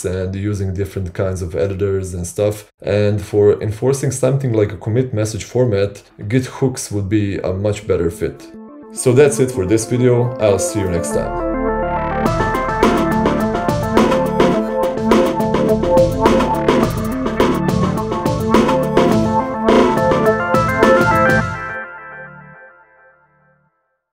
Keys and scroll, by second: 10.6 c, 11.0 Return.